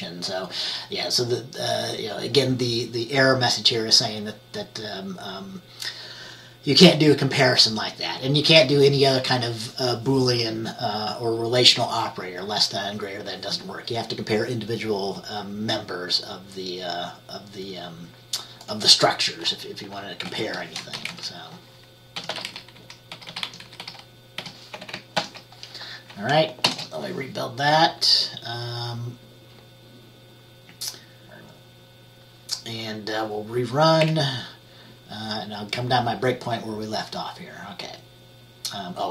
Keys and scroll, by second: 20.1-21.1 typing, 21.2 Left, 22.4-24.5 typing, 22.5 Down, 22.6 Left, 22.9 Left, 25.3 ctrl+s, 26.5-27.2 typing, 34.1 F5.